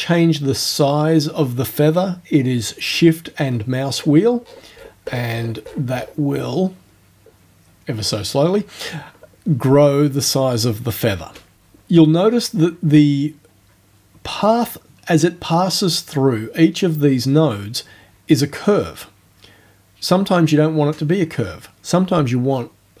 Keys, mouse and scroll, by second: 3.4-3.7 shift+scroll down 2, 4.5-5.9 shift+scroll up 8, 6.0 shift+scroll up 2, 7.3 shift+scroll down 2, 8.0 shift+scroll down 2.